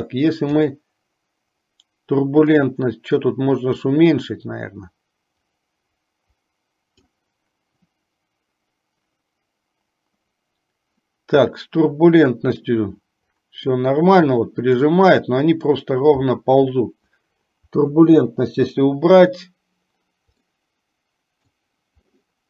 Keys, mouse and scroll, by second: 3.2-7.9 drag, 14.5-15.9 middle drag, 18.5 Delete, 20.9-22.0 middle drag.